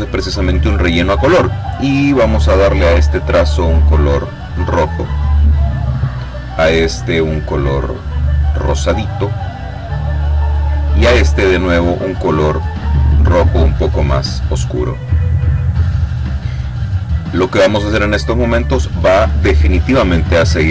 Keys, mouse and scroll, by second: 1.7 click, 3.4 click, 5.3 click, 7.1 click, 10.3 click, 11.9-14.5 drag, 15.4 click, 16.4 click.